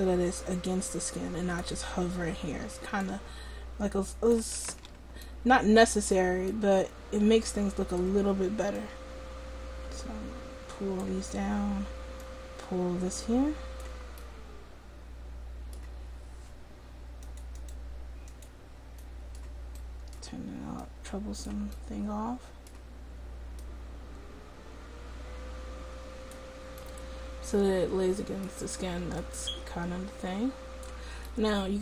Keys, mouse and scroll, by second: 4.7 ctrl+z, 8.9-14.2 drag, 14.2-15.7 middle drag, 17.3-26.9 drag, 29.2-31.4 drag.